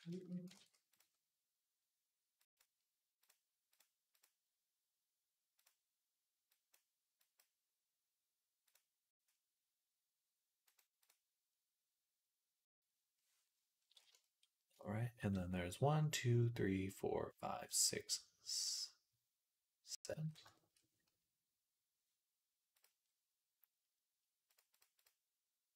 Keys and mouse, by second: 0.1-13.6 ctrl+shift+right drag, 0.4 ctrl+s, 0.7 click, 2.2 click, 3.1-6.6 drag, 7.0 click, 8.5-13.6 drag, 14.1 shift+click, 14.1 shift+right click.